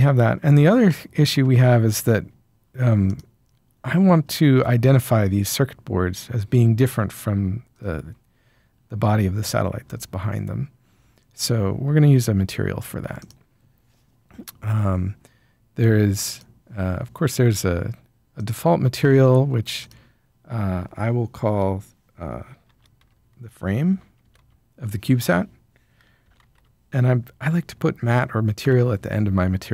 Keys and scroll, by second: 22.6-24.5 typing, 25.9-26.7 typing, 28.6 Return.